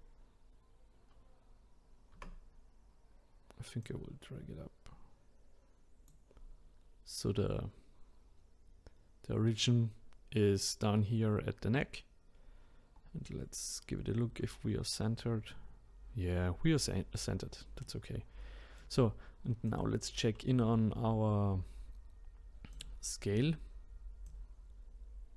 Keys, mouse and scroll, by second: 2.1 Tab, 3.8 click, 12.3-12.9 scroll up 1, 12.9-13.2 scroll down 1, 16.9-17.2 scroll down 1, 17.8-19.7 middle drag, 19.7 click, 22.7-24.4 drag.